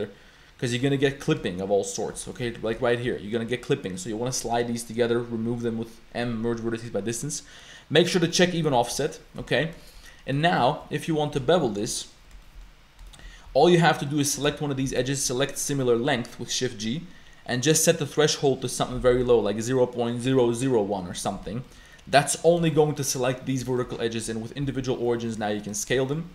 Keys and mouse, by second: 0.9 shift+middle click, 1.9 shift+click, 2.3 shift+click, 2.9 shift+click, 8.3 click, 9.1 shift+click, 9.8 shift+click, 10.5 shift+click, 10.5 shift+middle click, 11.6 shift+middle click, 12.4 shift+middle click, 13.1 shift+click, 13.5 2, 14.1 click, 14.9 shift+g, 18.0-20.6 drag, 19.1 0, 21.6 click, 22.1 click, 22.7 shift+click, 23.7 shift+click, 25.5 s, 26.0 shift+click.